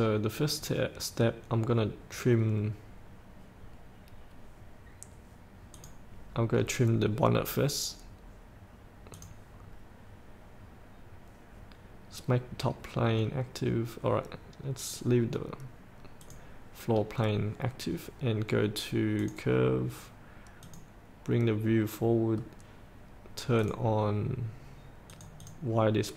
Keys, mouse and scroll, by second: 4.2-5.9 scroll up 1, 5.9 click, 6.8-9.3 scroll down 1, 9.3 click, 9.9-11.5 scroll up 1, 11.6-16.4 scroll up 1, 16.4 click, 17.3-19.4 scroll down 1, 19.4 click, 19.8-22.0 drag, 22.6-23.8 scroll down 1, 23.8 click.